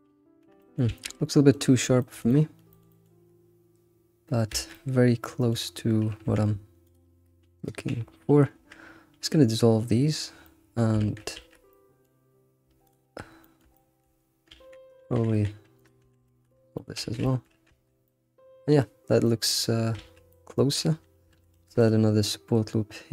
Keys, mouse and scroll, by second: 0.9 alt+shift+z, 1.1 scroll down 3, 1.3-2.7 middle drag, 4.5 alt+shift+z, 4.7 middle click, 5.6-6.0 scroll up 4, 6.2 Tab, 6.8 alt+click, 7.6 right click, 9.1-10.4 scroll down 2, 10.4-11.0 middle drag, 11.0 alt+shift+z, 11.3 alt+shift+z, 11.7-12.2 middle drag, 12.2-12.8 scroll up 1, 12.8 alt+click, 13.2 scroll down 2, 13.4 shift+middle click, 14.2-14.5 scroll up 1, 15.1 g, 16.0 a, 16.3 ctrl+shift+w, 16.6 scroll down 2, 16.8 middle click, 17.0 alt+x, 17.2 shift+middle click, 17.7 alt+shift+z, 17.9 scroll down 1, 18.1-19.8 middle drag, 19.8 scroll up 2, 20.0 alt+shift+z, 20.3-21.5 middle drag, 21.5 ctrl+r.